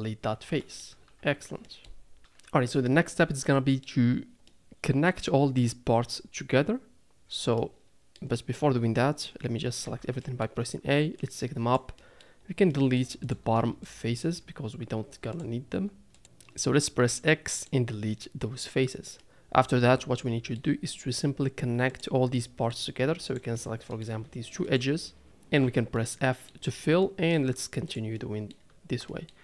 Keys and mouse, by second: 0.6 middle click, 1.2 Tab, 1.6 middle click, 3.4 middle click, 5.0 middle click, 7.9 middle click, 10.2 a, 10.3 middle click, 11.2 click, 12.0 middle click, 12.7 middle click, 15.3 shift+click, 17.0 x, 18.1 middle click, 19.2-20.6 middle drag, 22.0 click, 22.3 middle click, 23.5 middle click, 25.6 f, 25.9 middle click, 27.3 middle click, 27.9 click, 28.1 middle click, 29.1 middle click.